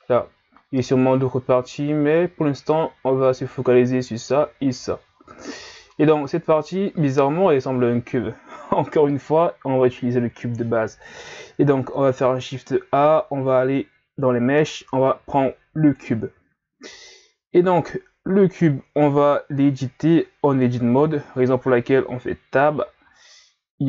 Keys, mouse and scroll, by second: 5.4-8.5 middle drag, 12.2 shift+a, 17.9-19.1 middle drag, 19.1 Tab, 21.0 KP_3, 21.9 ctrl+scroll down 3, 22.6 scroll up 2.